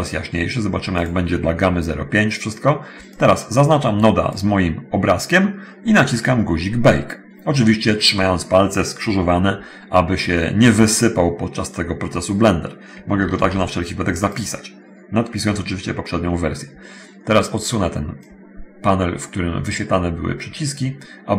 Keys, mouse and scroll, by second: 1.1 click, 3.3 click, 13.2 ctrl+s, 14.4 click, 18.4 click.